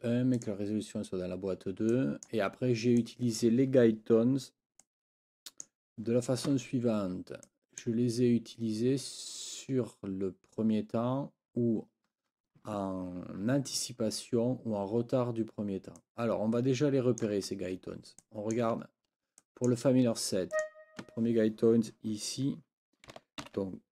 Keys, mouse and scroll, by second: 0.3 click, 1.9 click, 3.0 click, 4.8-5.8 drag, 7.5 click, 16.0-17.4 drag, 18.2 click, 18.9 ctrl+scroll up 2, 19.4 click, 20.5 click, 23.4 ctrl+l.